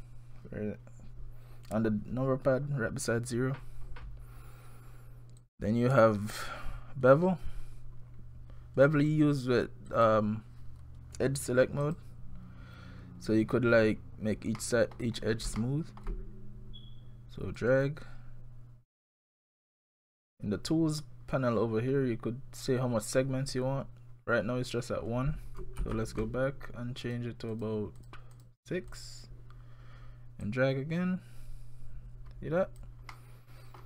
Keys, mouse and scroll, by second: 5.4 click, 8.0-9.6 scroll up 2, 9.6-9.9 scroll up 1, 9.9 click, 11.8 click, 14.6 middle click, 15.2-15.6 scroll up 4, 15.6 shift+middle click, 16.1 scroll down 1, 17.6 click, 25.8 ctrl+z, 27.1 click, 27.5 click, 28.0 click, 28.3 click, 28.9 click, 30.4 click, 33.1 middle click, 33.8 scroll up 1.